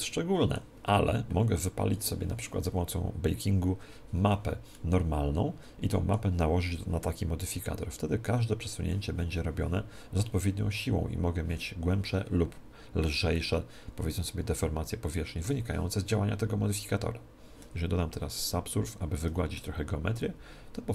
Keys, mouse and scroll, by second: 13.3-15.3 middle drag, 18.7 ctrl+2, 19.7-20.9 middle drag.